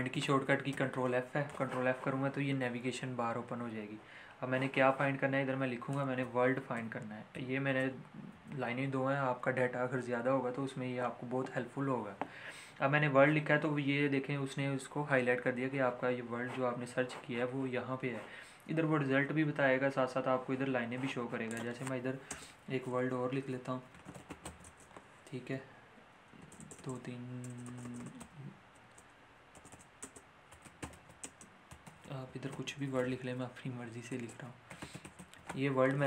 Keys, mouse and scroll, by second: 0.7 ctrl+f, 6.1-8.3 typing, 21.5 click, 22.2 Return, 23.6-24.9 typing, 28.1 h, 28.8 Return, 30.5-33.4 typing, 34.1 Return, 34.4-35.6 typing.